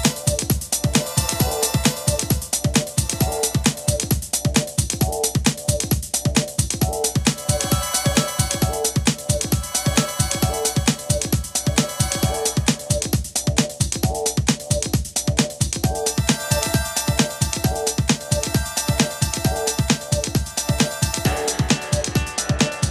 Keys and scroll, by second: 3.8 Page_Up, 4.4 Page_Down, 13.5 d, 20.4 Page_Up, 20.6 Page_Up.